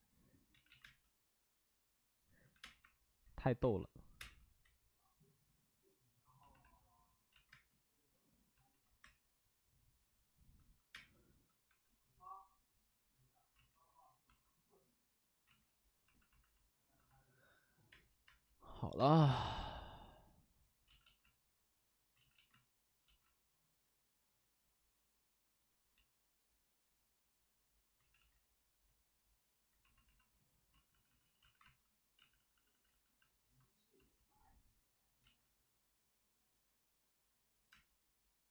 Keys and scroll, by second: 0.6 ctrl+z, 0.8 space, 2.5 4, 2.5 5, 2.5 space, 2.8 4, 3.6 ctrl+z, 4.0 5, 4.1 space, 7.2 ctrl+z, 7.5 space, 8.9 3, 10.9 space, 11.6 5, 13.7 ctrl+z, 15.4 ctrl+z, 17.5 ctrl+z, 17.9 space, 18.2 space, 18.9 space, 20.8 ctrl+z, 22.1 ctrl+z, 22.3 ctrl+z, 23.0 ctrl+z, 28.1 ctrl+z, 30.7 ctrl+z, 30.8 ctrl+z, 31.0 ctrl+z, 37.6 space.